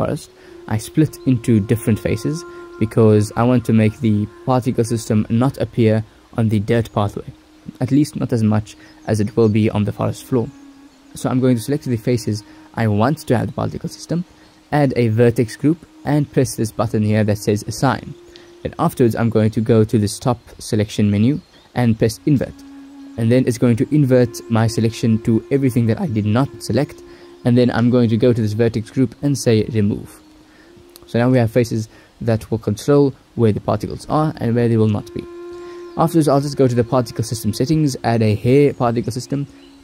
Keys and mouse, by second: 12.5 alt+shift+click, 15.0 alt+shift+click, 15.5-17.3 alt+shift+drag, 20.2-21.8 drag, 24.0 click, 24.4 click, 25.9 Tab, 27.3 ctrl+s, 30.8 Tab, 31.5 ctrl+s, 32.5 click, 35.8 click, 38.3 click, 39.2 click.